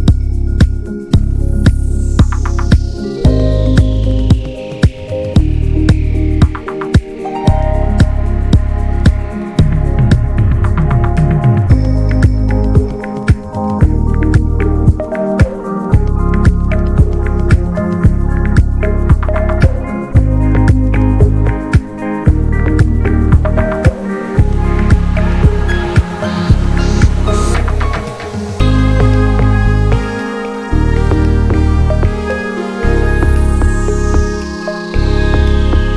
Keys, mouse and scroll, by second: 1.3 click, 1.6 alt+shift+click, 1.7 alt+shift+drag, 2.0-2.6 middle drag, 2.6 click, 3.7 Tab, 3.8 drag, 3.9-4.3 scroll down 1, 4.3 middle drag, 4.6 drag, 4.8-5.2 scroll down 3, 5.2-5.7 shift+middle drag, 5.7 scroll down 1, 5.9 shift+middle click, 6.0 scroll up 1, 6.1 drag, 6.7 ctrl+a, 7.2 drag, 7.4 middle click, 7.7-8.5 scroll up 7, 8.0 shift+middle click, 8.6 ctrl+s, 8.8 click, 9.3 /, 9.6-10.4 middle drag, 10.4 Tab, 11.0 3, 11.1-11.9 drag, 11.9 x, 13.0 Tab, 13.1 drag, 13.4 middle drag, 13.6 click, 15.3 ctrl+1, 15.6 middle click, 15.8 scroll up 1, 16.0 middle click, 16.4 ctrl+s, 16.8 Tab, 17.2 shift+middle click, 17.3-17.6 scroll up 2, 17.6 2, 17.9 click, 18.2 alt+shift+click, 18.4-19.1 alt+shift+drag, 19.1 shift+middle click, 19.2-19.5 scroll up 1, 19.5-20.6 middle drag, 20.6 alt+shift+click, 20.8 middle click, 21.0 scroll up 1, 21.1-22.0 shift+middle drag, 22.0 click, 22.7 click, 23.0-23.4 shift+middle drag, 23.4 scroll up 1, 23.7-24.3 middle drag, 24.3 alt+shift+click, 24.6 middle click, 24.7-25.1 scroll down 1, 25.1 ctrl+b, 26.8-28.2 scroll down 2, 28.2-28.6 scroll down 1, 28.6-29.1 middle drag, 29.1 ctrl+s, 29.6 /, 29.9 click, 30.1-32.5 drag, 32.5-32.9 scroll down 3, 33.1 shift+middle click, 33.4 click, 33.6 scroll down 1, 33.7 middle drag, 34.0 ctrl+s, 34.1 drag.